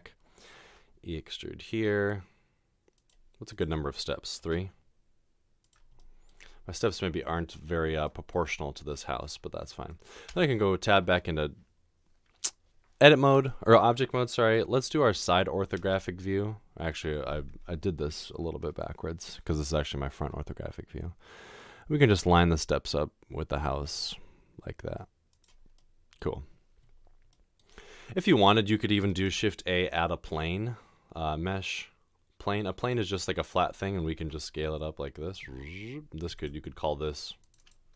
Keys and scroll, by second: 0.7 e, 10.4 Tab, 15.2-15.8 typing, 20.2 g, 23.7 typing, 29.3 a, 34.3 s.